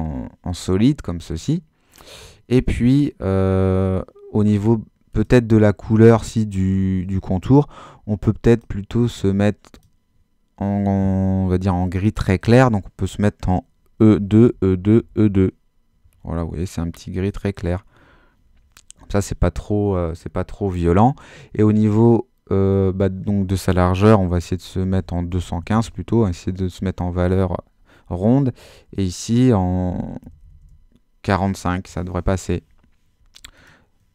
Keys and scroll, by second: 13.7-15.6 typing, 24.7-26.0 typing, 26.2 Tab, 30.0-30.9 typing.